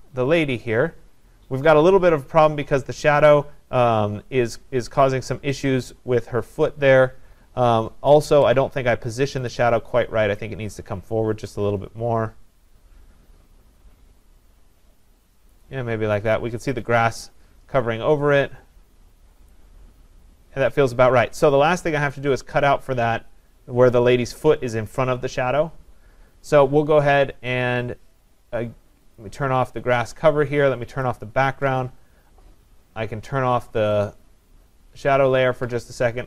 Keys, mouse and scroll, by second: 9.5-16.1 drag, 16.7 click, 19.5 click, 29.2 click, 31.2 click, 34.1 click.